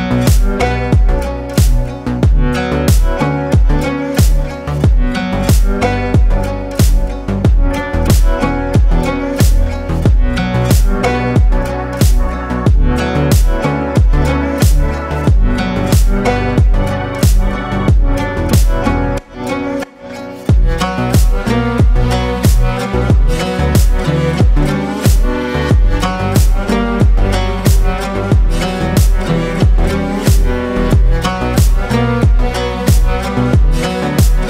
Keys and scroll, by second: 9.1 Delete, 14.8 Delete, 21.1 ctrl+g.